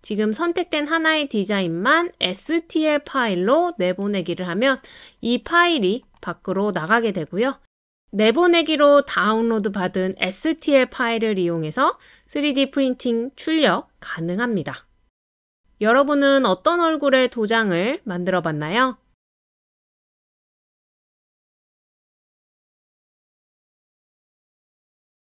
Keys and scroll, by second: 9.3 typing, 11.0 typing.